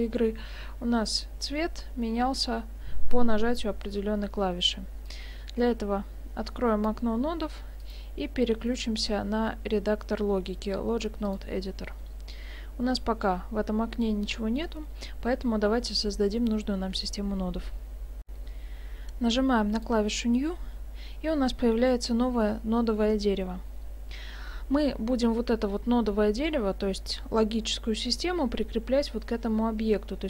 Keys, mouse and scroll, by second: 7.8 click, 18.3 F9, 19.8 click.